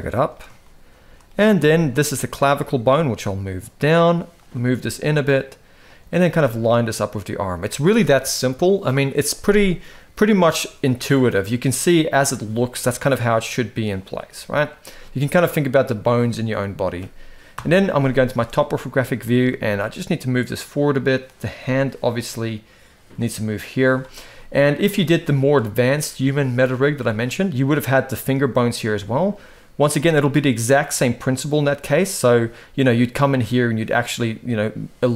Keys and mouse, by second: 0.4 shift+middle click, 1.4 shift+middle click, 2.1 click, 2.7 g, 4.2 click, 4.4 g, 5.9 g, 12.7 g, 13.9 g, 17.3 KP_7, 18.0 shift+middle click, 19.2 g, 21.2 g, 23.9 shift+middle drag, 24.7 shift+middle drag, 30.1 g, 31.5 click.